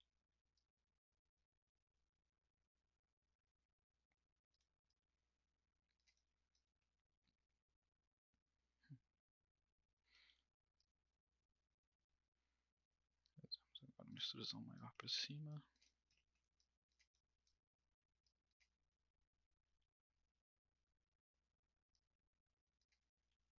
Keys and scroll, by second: 10.2 w, 10.3 w, 19.6 r, 23.2 w.